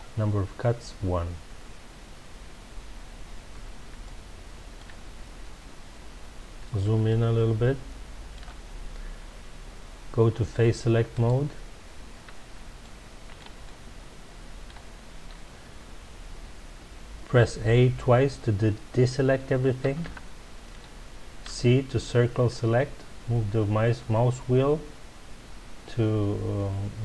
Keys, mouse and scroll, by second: 2.9-4.0 scroll up 2, 4.0-5.5 shift+middle drag, 5.5-7.1 scroll up 2, 7.1-10.1 shift+middle drag, 11.1 click, 12.8-16.6 shift+middle drag, 19.8 a, 21.4 c.